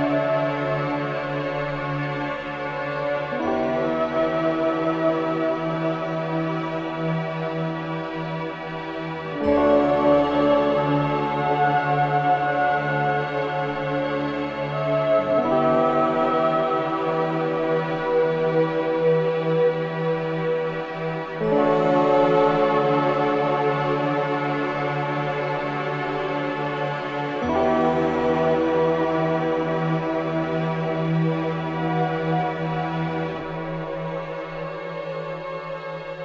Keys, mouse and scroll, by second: 2.5 ctrl+b, 6.9-10.8 drag, 11.6 click, 12.2-13.8 middle drag, 13.8 ctrl+z, 14.0 ctrl+z, 17.2 ctrl+z, 21.0 ctrl+z, 22.6 ctrl+z, 24.6-26.3 middle drag, 27.4 scroll up 1, 28.6 e, 30.3 middle click, 31.1-31.5 scroll down 2, 31.5 middle click, 32.1-33.1 scroll down 10, 33.1 middle click, 34.0 click, 34.3-34.7 scroll down 2, 34.7-36.2 middle drag.